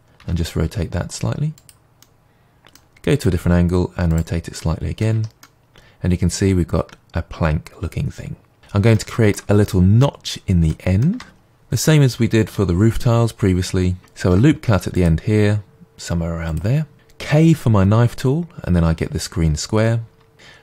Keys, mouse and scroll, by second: 0.2 r, 1.6 click, 2.0-4.1 middle drag, 3.2 r, 4.1 click, 4.6-10.2 middle drag, 5.1 Tab, 8.6 Tab, 10.2-10.6 scroll up 1, 11.4-14.2 middle drag, 14.2 ctrl+r, 16.5 click, 17.2-20.6 middle drag, 17.2 k.